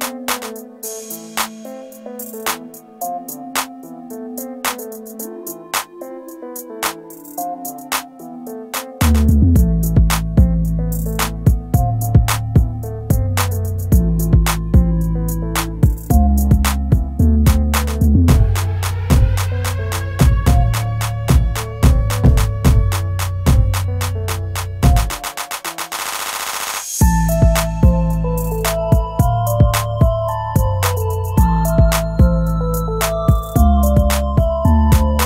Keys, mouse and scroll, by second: 10.8 ctrl+click, 16.0 scroll down 1, 17.1 scroll up 1, 23.1 typing.